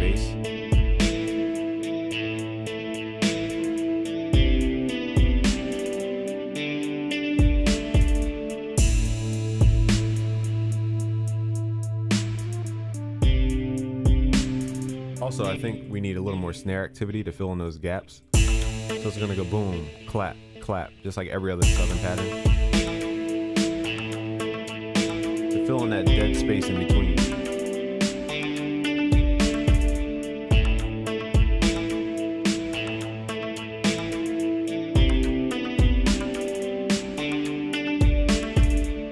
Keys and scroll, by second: 29.5 ctrl+s.